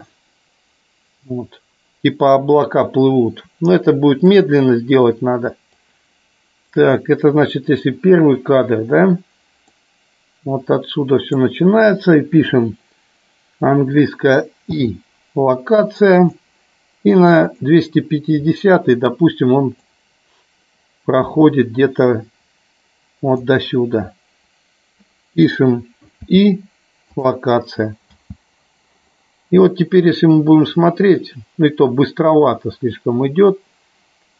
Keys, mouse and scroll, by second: 5.7-6.8 drag, 7.8 click, 9.9-11.4 drag, 17.6 click, 19.8-23.6 drag, 28.0 space.